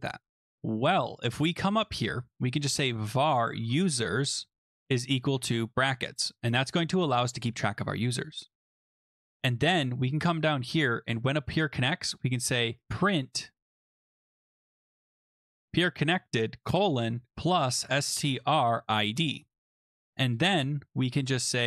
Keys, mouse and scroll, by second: 0.3-0.8 scroll, 1.8 click, 2.3 Return, 2.3-5.4 typing, 2.6 middle click, 5.3 click, 7.1 middle click, 9.4 scroll down 4, 10.4 click, 11.0 Return, 11.4 middle click, 12.2-20.0 typing, 20.3 Return, 21.3-21.6 typing.